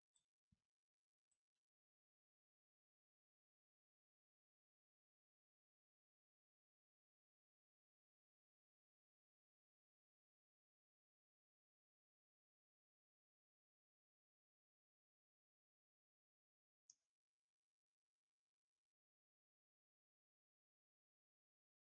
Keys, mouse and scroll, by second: 0.0 middle click, 0.5 scroll up 1, 0.7 scroll down 1, 1.1 shift+middle click, 1.5 scroll down 1, 2.0 middle click, 3.0 click, 3.9 shift+middle click, 5.3 click, 5.9 middle click, 6.3 scroll down 1, 7.1 shift+middle click, 7.7 shift+scroll up 1, 7.8 shift+middle click, 8.8 shift+middle click, 10.0 shift+middle click, 10.3 scroll up 1, 10.6 s, 13.2 shift+space, 14.0-16.5 drag, 16.7 shift+space, 17.5 ctrl+space.